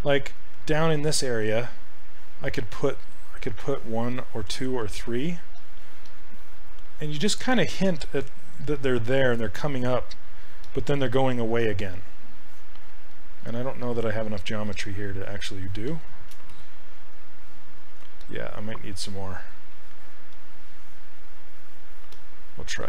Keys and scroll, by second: 16.6 shift+f, 17.9 shift+f.